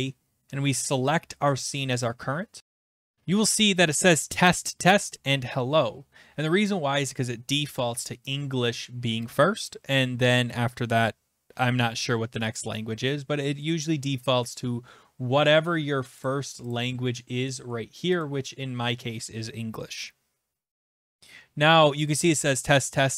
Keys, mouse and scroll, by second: 2.1 click, 16.3 click, 16.7 click, 18.2 click, 21.0 click.